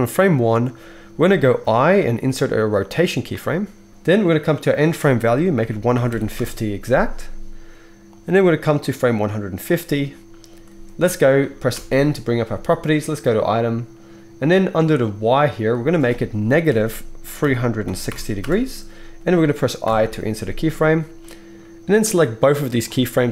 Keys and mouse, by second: 1.6 i, 11.7 n, 13.4-15.1 middle drag, 15.1-23.3 drag, 19.9 i.